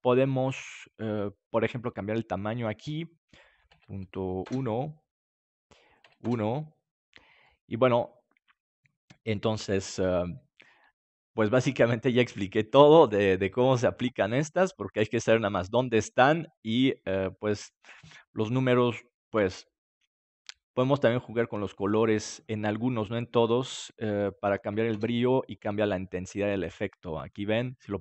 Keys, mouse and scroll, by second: 2.8-7.6 drag, 7.4-9.6 middle drag, 14.6-16.4 drag, 18.7-20.4 drag, 22.1-26.9 drag, 27.7-28.0 drag.